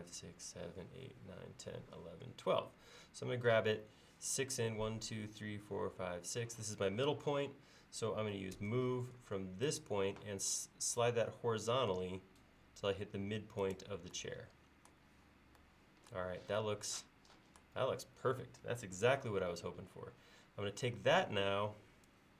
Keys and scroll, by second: 8.6 m.